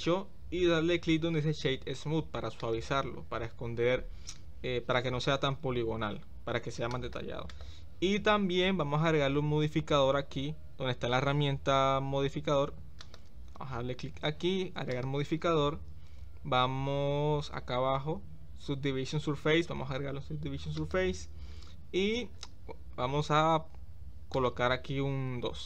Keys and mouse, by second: 6.0 ctrl+z, 13.0 click, 14.9-21.1 drag, 24.5-25.6 drag.